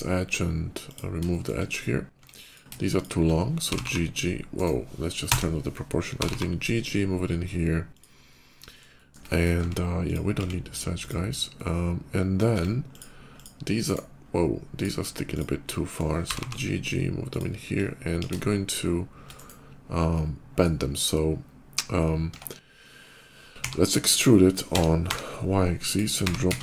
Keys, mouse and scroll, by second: 0.5 click, 1.1 shift+middle click, 1.9 Tab, 2.2 click, 2.8 shift+Tab, 2.8 shift+click, 3.4 f, 3.5 g, 3.6 g, 4.4 right click, 5.1 o, 6.0 g, 6.3 g, 7.8 click, 7.9 middle click, 8.7 shift+middle click, 9.1 shift+middle click, 9.4 Tab, 9.9 click, 10.1 x, 10.8 click, 11.2-12.2 middle drag, 12.3 Tab, 12.7 click, 13.2 click, 13.7 right click, 14.5 click, 15.1 shift+click, 15.5 shift+middle click, 16.1 g, 16.3 g, 17.1 click, 18.0 ctrl+b, 18.6 ctrl+shift+b, 19.2 right click, 19.9 shift+middle click, 22.2 Tab, 23.3 e, 24.5 t, 24.9 y, 25.7 click, 26.1 g, 26.3 z.